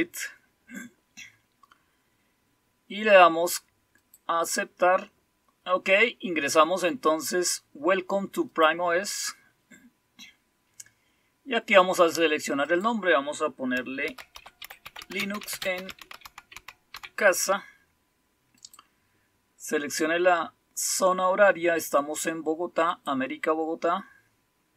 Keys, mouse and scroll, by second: 0.0 click, 3.9 click, 8.5 click, 12.6 click, 13.7-17.3 typing, 18.5 click, 19.0 click, 22.8 click.